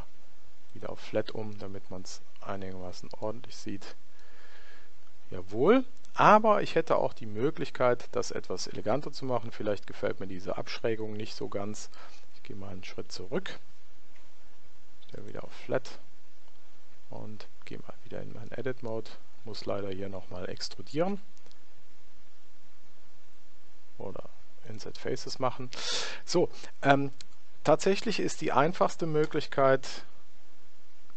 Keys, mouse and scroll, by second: 0.8 click, 1.6-3.3 middle drag, 3.6-5.9 middle drag, 12.1 ctrl+z, 13.1 ctrl+z, 15.2 click, 17.1 Tab, 18.5-20.2 middle drag, 21.1 i, 28.8 i.